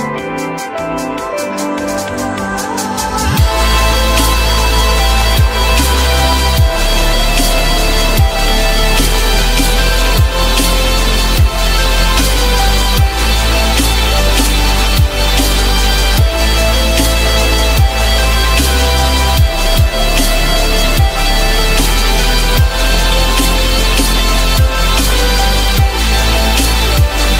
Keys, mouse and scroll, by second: 1.2 ctrl+z, 2.5 alt+middle click, 3.1 alt+middle click, 3.5 alt+middle click, 3.9 alt+middle click, 4.3 F4, 5.3 F4, 5.8 F4, 8.2 F4, 9.5 alt+middle click, 12.1 alt+middle click, 12.6 alt+middle click, 12.8 alt+double middle click, 13.2 F4, 14.8 alt+middle click, 15.6 alt+middle click, 16.5 ctrl+z, 17.6 alt+middle click, 20.0 ctrl+z, 21.7 F4, 23.7 ctrl+click.